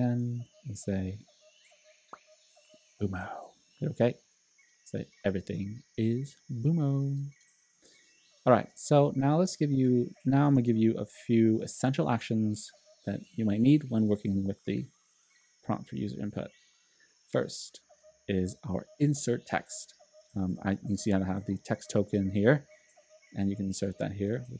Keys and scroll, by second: 10.8 super+k.